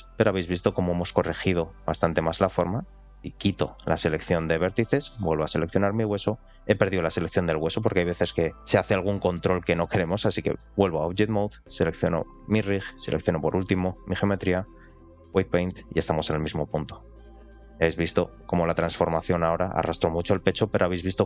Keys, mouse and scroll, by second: 0.3-0.7 scroll up 1, 0.9 r, 1.5-2.9 right drag, 4.3 click, 4.8 shift+middle click, 5.8 ctrl+click, 9.9-10.8 drag, 12.2 click, 12.9 shift+click, 14.4-15.3 drag, 16.2 ctrl+click, 16.9 r, 17.7 click, 18.5 click, 19.2 click, 20.7 click.